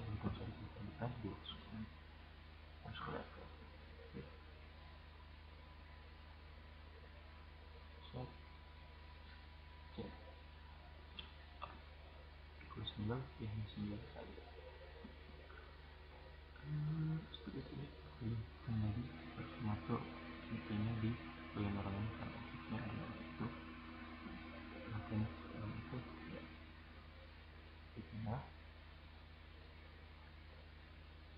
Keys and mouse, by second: 2.1 middle click, 2.4-3.4 right drag, 3.4-3.9 middle drag, 4.1 right click, 4.5-5.0 middle drag, 5.0 right click, 9.8 right click, 10.3-11.9 right drag, 13.2-14.2 right drag, 15.1-16.2 drag, 16.3-16.7 middle drag, 18.5-19.9 right drag, 20.4 click, 22.0 click, 22.1 right click, 22.7-23.5 middle drag, 23.5 click, 26.9-27.4 middle drag, 28.6-29.3 drag.